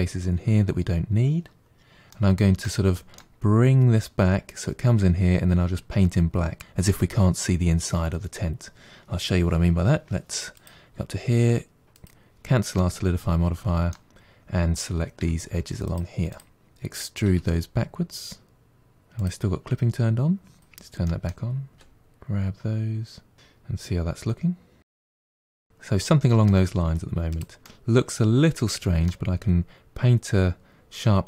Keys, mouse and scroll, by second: 1.9-5.8 middle drag, 10.4 click, 11.8 click, 12.6-15.0 middle drag, 15.0 2, 15.7 click, 16.1 shift+click, 16.6 shift+click, 16.7 middle click, 17.2 e, 19.2 click, 19.5 click, 19.7 middle click, 20.4 g, 21.5-23.8 middle drag, 23.8 1, 23.9 click, 24.2 g, 24.8 middle click, 25.1 g, 25.5-26.7 middle drag, 26.7 g, 27.5-30.5 middle drag.